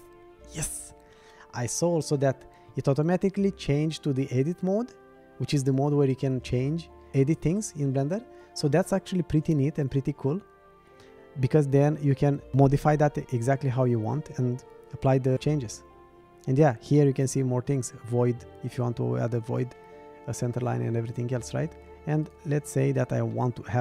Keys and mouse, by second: 3.9 click, 22.2 click, 23.3-23.8 middle drag.